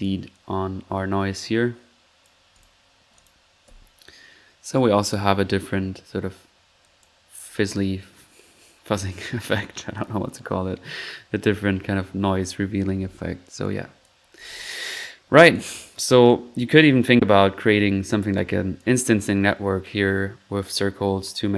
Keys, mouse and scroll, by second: 0.3-1.8 drag, 2.2 click, 3.1 click, 3.4-4.1 typing, 5.2 typing, 6.8 click, 9.3 typing, 13.6 click, 14.3 alt+1, 15.5 click, 16.8 typing, 16.8 middle click, 18.4 click, 18.7-19.1 typing, 18.8 click.